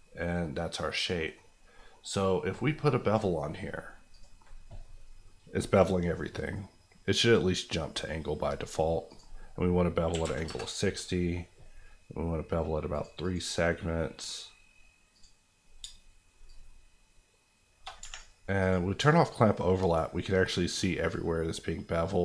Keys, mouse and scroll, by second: 1.4 scroll up 1, 1.9 middle click, 1.9 scroll up 1, 3.0 click, 4.7 scroll up 1, 7.2 click, 10.1 KP_6, 10.2 KP_0, 10.4 KP_Enter, 12.9 click, 15.8-17.9 shift+drag, 17.9 click, 18.6 click, 18.9-22.2 shift+drag.